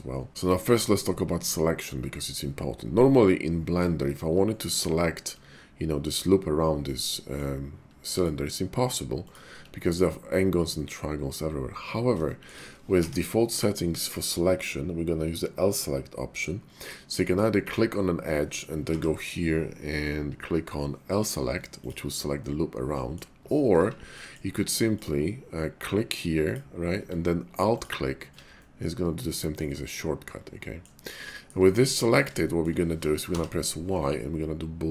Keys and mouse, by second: 3.3 middle click, 6.7 middle click, 9.8 click, 10.7 middle click, 12.2 shift+middle click, 13.0 y, 18.9 y, 22.3 middle click, 23.7 ctrl+z, 24.1 middle click, 27.6 alt+click, 28.6-30.8 middle drag, 31.4 shift+middle click, 32.0 middle click, 32.5 shift+middle click, 33.3 y.